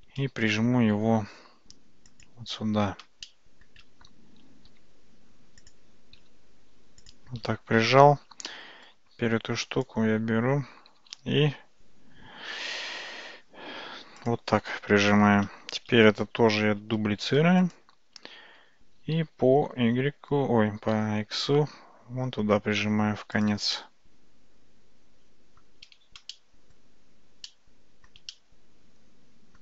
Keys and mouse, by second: 1.0 g, 3.3-3.7 shift+middle drag, 6.2 g, 8.5-9.0 middle drag, 9.4 Tab, 9.6 click, 10.9 g, 15.2 Tab, 17.3 shift+d, 18.6 g, 23.8-25.7 middle drag, 26.4-26.8 shift+middle drag, 27.5 middle click, 28.4-29.6 shift+middle drag.